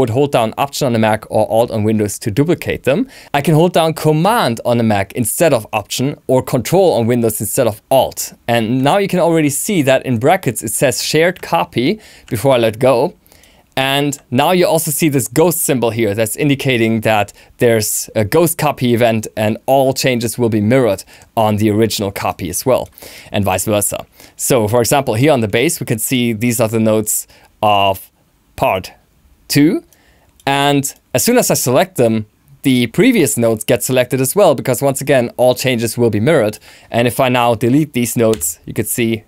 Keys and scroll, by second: 38.2 BackSpace.